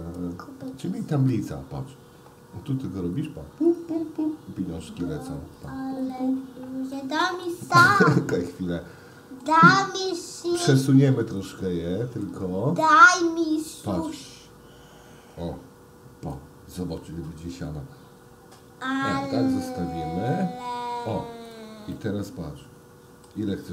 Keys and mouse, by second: 3.7 click, 5.7 click, 7.0-7.4 shift+middle drag, 8.5-9.5 middle drag, 11.3 click, 12.2 click, 13.3-16.4 drag, 17.8-19.3 drag, 19.6 ctrl+z, 20.3-21.5 drag, 21.9-23.3 middle drag.